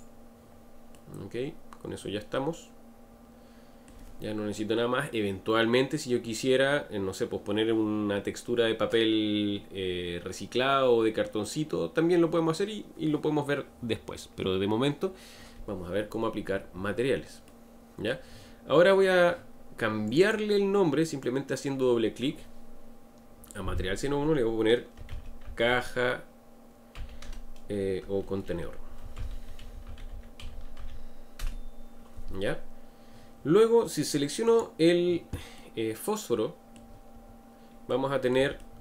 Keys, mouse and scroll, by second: 0.9-3.9 middle drag, 17.4-20.1 middle drag, 20.1-23.3 drag, 28.2 BackSpace, 28.5 BackSpace, 28.7 BackSpace, 34.4 click, 35.5-37.2 middle drag, 37.2 scroll up 2, 37.9-38.8 middle drag.